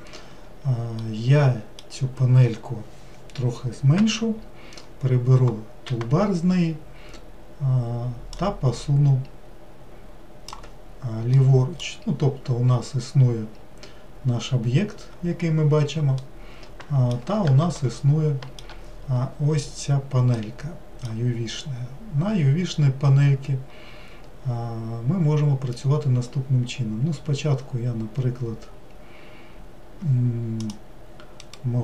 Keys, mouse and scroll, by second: 8.5-11.5 drag, 11.5 middle click, 12.1 scroll down 2, 12.9-13.6 scroll down 5, 13.6-15.1 scroll down 1, 16.3-30.7 middle drag, 30.7 click.